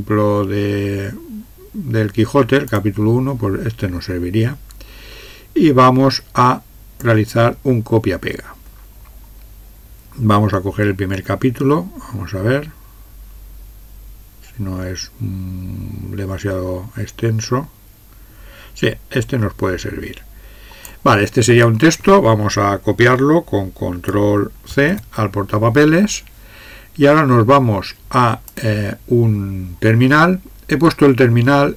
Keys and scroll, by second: 24.7 ctrl+c.